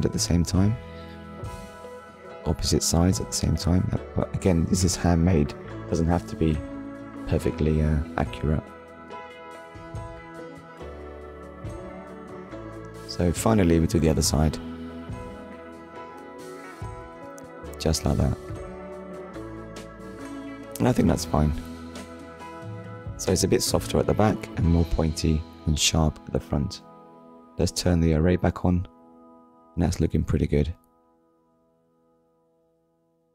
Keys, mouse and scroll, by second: 4.9 click, 5.2 Tab, 5.7 middle click, 8.2 Tab, 8.7 middle click, 12.7 click, 13.5 ctrl+click, 14.8 shift+click, 15.6 ctrl+click, 20.3 click, 20.6 Tab, 21.0 click, 21.3 middle click, 22.2 scroll down 1, 22.8 scroll down 1, 23.3 middle click, 24.9 shift+middle click, 27.1 click, 27.7 click, 30.7 scroll down 1, 31.8 shift+middle click, 32.2 middle click, 33.0 shift+middle click.